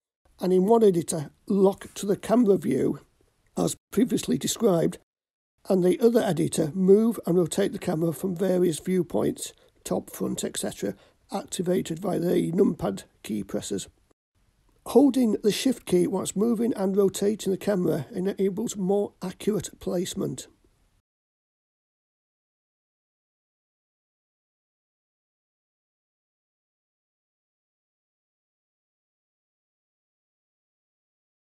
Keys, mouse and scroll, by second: 0.9 ctrl+alt+KP_0, 3.8 click, 5.2 click, 6.2 n, 6.9 t, 9.9 click, 10.8 KP_7, 12.8-13.3 shift+middle drag, 13.6-14.0 scroll down 2, 14.3 scroll down 2, 14.8-15.3 shift+middle drag, 15.7-16.4 drag, 17.5 g, 21.0 click, 22.2 r, 25.0 click, 25.7 KP_3, 28.3-28.8 shift+middle drag, 30.1 g.